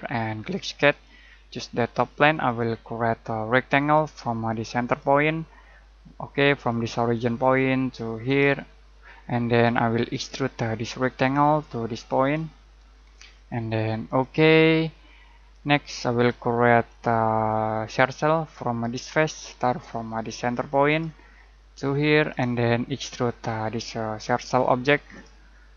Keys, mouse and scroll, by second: 2.3 click, 6.7 click, 15.0 middle click, 16.8 click, 18.9 click, 20.9 click.